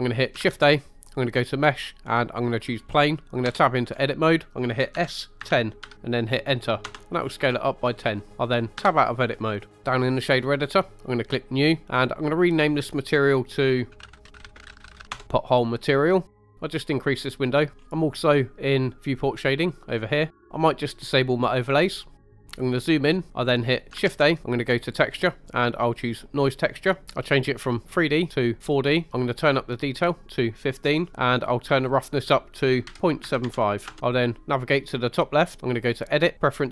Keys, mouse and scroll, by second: 0.4 shift+a, 3.4 Tab, 3.9-4.9 scroll up 2, 4.9 s, 5.4 1, 5.8 0, 6.8 Return, 7.1 scroll down 2, 8.2 middle click, 8.3 Tab, 8.8 Tab, 11.2 click, 11.9 click, 16.4 click, 17.7-18.1 scroll up 4, 18.2 click, 20.3-21.3 middle drag, 21.3 click, 22.2-23.1 scroll up 4, 22.2 middle click, 23.1 middle click, 24.0 shift+a, 26.7 click, 27.8-28.6 drag, 29.5 click, 32.1 click, 35.8-36.7 drag.